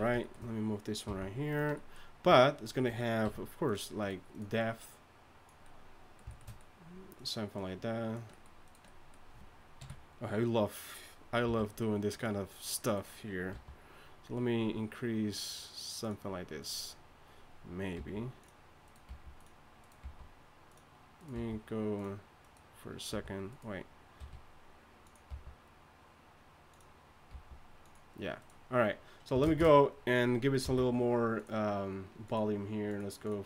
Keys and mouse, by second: 1.1 g, 3.2 w, 9.8 KP_2, 9.8 KP_3, 11.4 r, 13.5 g, 17.9 g, 19.1 g, 20.0 g, 21.3 g, 24.2 r, 25.3 g, 27.3 g, 29.4 shift+space, 30.6 n.